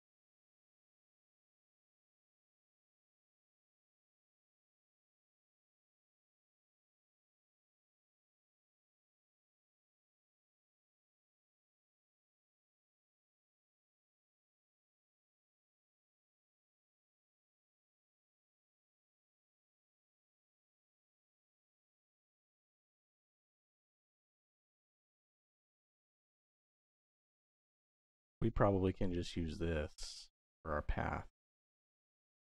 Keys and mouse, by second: 21.3 click, 22.5 shift+a, 23.4 p, 27.0-28.1 drag, 29.3 middle click, 30.1 middle click.